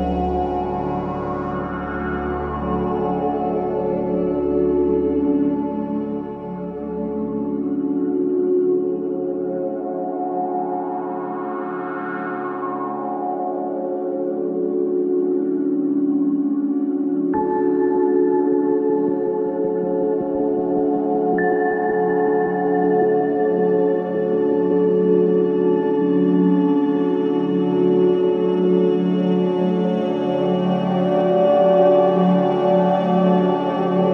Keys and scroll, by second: 2.7 3, 5.0 4, 5.6 3, 7.2 End, 7.8 Delete, 9.0 Delete, 10.3 Delete, 10.8 Delete, 11.6 Delete, 14.0 ctrl+z, 14.9 Delete, 15.6 Delete, 16.1 Delete, 16.8 Delete, 17.9 Delete, 21.2 Delete, 23.8 Delete, 24.7 Delete, 25.4 Delete, 26.1 Delete, 26.7 Delete, 27.4 Delete, 28.1 Delete, 31.0 ].